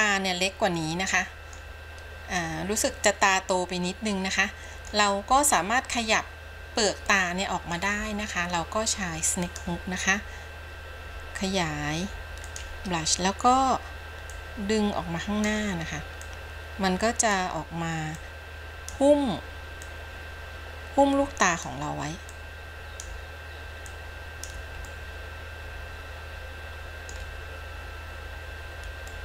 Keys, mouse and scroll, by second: 0.1-0.7 scroll up 2, 0.7-1.8 middle drag, 2.5-5.1 middle drag, 7.2 middle click, 9.6 click, 11.3 f, 14.5-15.8 drag, 16.5-17.6 drag, 18.4 click, 20.1-21.9 drag, 22.5 click, 24.1 click, 25.1-27.4 middle drag.